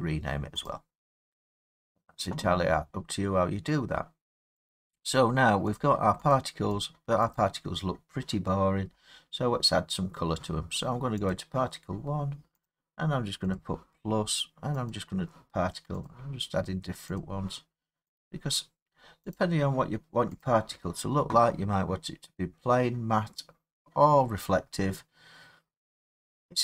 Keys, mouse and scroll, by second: 0.7 click, 4.7 click, 5.8 click, 6.3 click, 6.8 click, 7.4 click, 8.8 middle click, 8.9 middle click, 8.9 middle click, 11.3 click, 12.7 click, 13.6 click, 14.9 click, 16.1 click, 18.2 click, 19.4 click, 20.5 click.